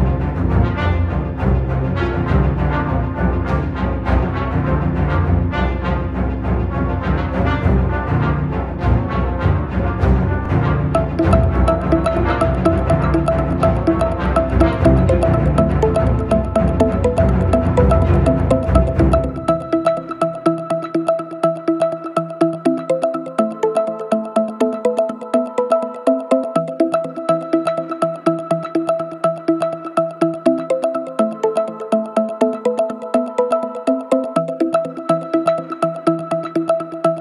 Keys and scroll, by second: 3.3 ., 3.9 Escape, 4.3 ,, 4.9 Escape, 5.1 ., 7.4 ], 9.1 ], 11.6 ctrl+z, 13.1 ctrl+z, 16.1 ], 23.7 ], 25.8 ], 26.4 ], 29.1 ], 31.9 4, 35.1 3, 35.7 ].